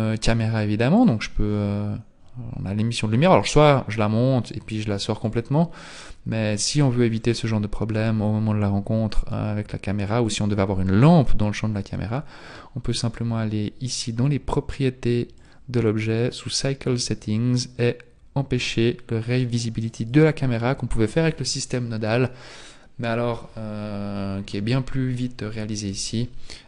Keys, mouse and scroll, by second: 0.5 click, 0.5-1.4 scroll down 7, 1.7-4.0 scroll down 3, 4.0 click, 5.3 click, 6.6-7.8 scroll down 5, 14.1-15.4 scroll down 1, 15.4 click, 15.4-16.8 scroll down 6, 16.8-17.4 scroll down 2, 19.9 click.